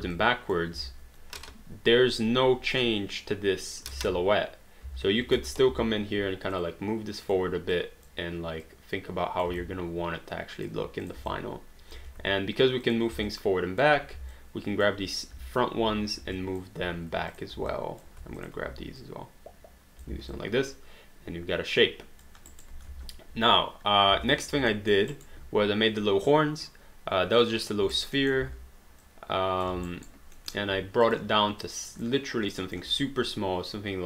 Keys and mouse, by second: 0.1 click, 0.8 w, 1.4 click, 3.9 ctrl+z, 5.4 space, 6.5 click, 7.7 click, 9.6 alt+click, 11.0 click, 11.3 alt+click, 12.8 shift+click, 13.3 alt+click, 14.3 alt+click, 15.9 w, 16.4 alt+click, 17.3 shift+click, 17.7 alt+click, 18.4 shift+click, 19.0 click, 20.1 alt+d, 20.3 alt+click, 22.6 alt+right click, 22.9 space, 24.1 space, 24.7 alt+middle click, 25.1 alt+right click, 27.4 click, 27.9 alt+right click, 28.2 alt+middle click, 28.4 w, 29.9 alt+right click, 30.4 alt+middle click, 31.1 click, 33.0 middle click.